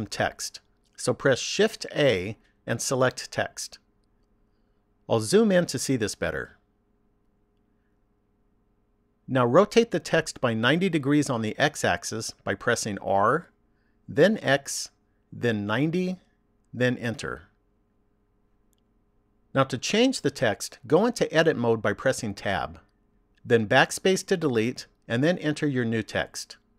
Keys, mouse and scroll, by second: 1.6 shift+a, 5.2-7.3 scroll up 8, 7.3-11.4 scroll up 4, 13.4 r, 19.2 shift+middle click, 22.4 Tab, 23.6-26.7 typing.